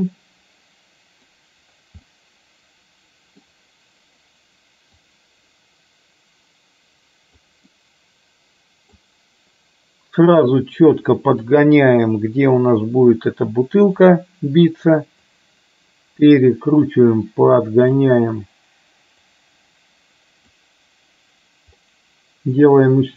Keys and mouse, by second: 2.2-3.6 middle drag, 5.1-7.4 drag, 7.7-9.0 middle drag, 11.8-14.2 drag, 15.5-18.0 drag, 19.3-20.5 drag.